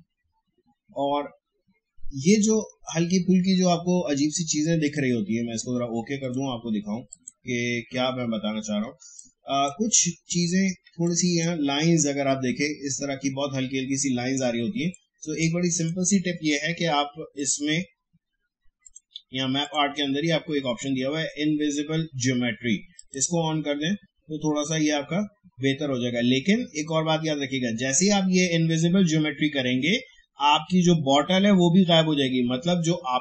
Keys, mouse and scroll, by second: 4.8 click, 8.3 alt+scroll up 1, 9.0 space, 9.1 click, 9.5 space, 10.1 alt+scroll up 1, 10.9 space, 11.0 click, 11.3 space, 12.0 alt+scroll up 1, 13.5 alt+scroll down 1, 14.8 space, 14.9 click, 15.3 space, 15.7 click, 22.9 click.